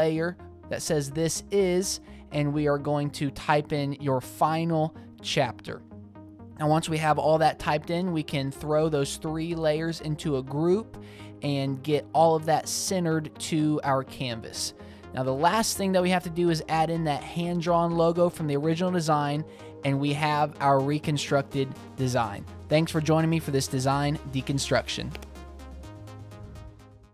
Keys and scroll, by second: 0.4-2.2 typing, 3.4 t, 3.6 alt+super+z, 4.5 alt+shift+t, 4.7 super+a, 4.8-7.6 typing, 7.5 Escape, 9.5 Right, 13.6 super+d, 14.2 super+c, 15.2 super+v.